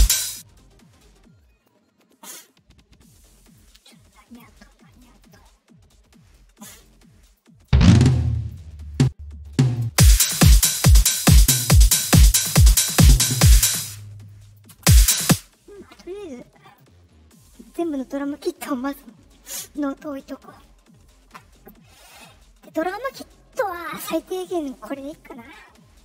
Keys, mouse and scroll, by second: 0.0 space, 1.6 click, 3.4 click, 5.1 click, 6.6 right click, 7.2 click, 7.6 click, 8.8 click, 9.4 click, 9.8 space, 12.1 click, 12.7 click, 13.6 space, 14.2 click, 14.7 space, 15.1 space, 16.6 click, 23.0 middle click, 24.1 click.